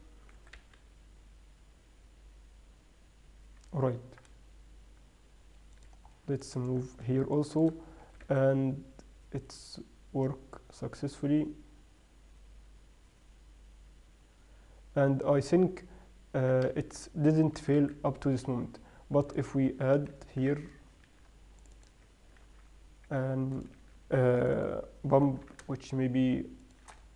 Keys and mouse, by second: 0.0 middle click, 0.8 g, 6.5-9.5 middle drag, 8.5 g, 18.0 g, 20.4-22.2 right drag, 21.8 Tab, 21.8 ctrl+r, 22.8 ctrl+b, 24.6 ctrl+r, 25.6 g.